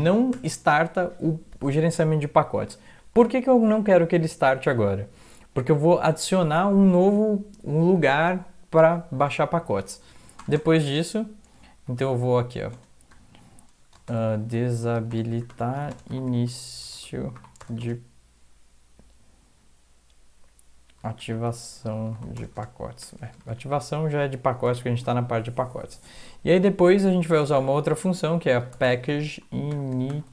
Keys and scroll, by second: 0.3 End, 10.4 Return, 10.6 Return, 11.6 Up, 11.8 Up, 12.0 End, 12.7-18.3 typing, 20.8-23.5 typing, 24.7-25.7 typing, 27.6-30.3 typing.